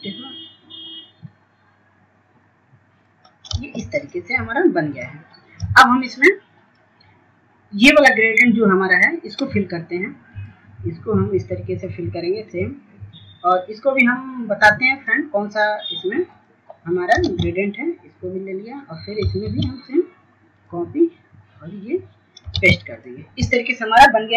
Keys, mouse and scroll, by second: 6.0 ctrl+space, 6.4 click, 6.8 scroll down 1, 7.4 click, 8.0 F2, 8.4-19.7 drag, 19.8 ctrl+space, 20.8 click, 22.0 ctrl+space, 23.2 click.